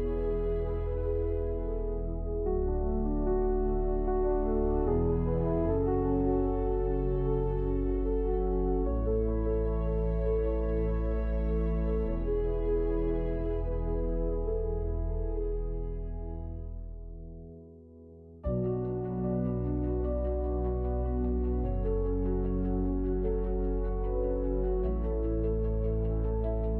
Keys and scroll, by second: 0.3-1.2 typing, 2.1 Tab, 3.3 Return, 4.5-5.5 typing, 6.6 Tab, 8.4 Return, 11.2 j, 13.7 ctrl+r, 16.5 shift+x, 17.8 shift+e, 18.8 shift+w, 19.6 Escape, 21.2 shift+w, 25.2 w, 26.4 Return.